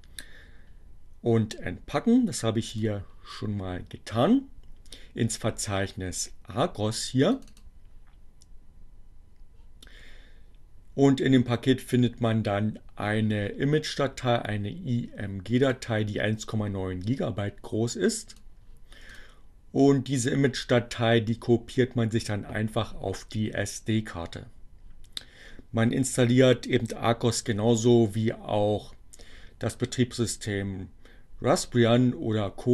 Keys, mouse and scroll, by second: 1.9-3.1 drag, 6.3 click, 15.6 click, 18.2 click, 19.2 click.